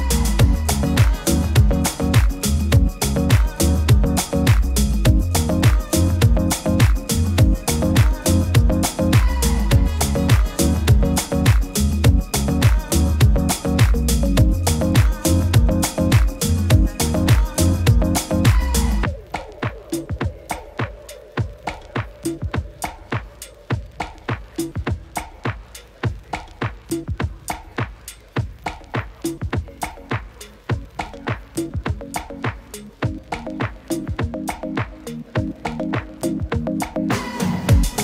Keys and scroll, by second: 19.3 super+-, 19.4 super+-.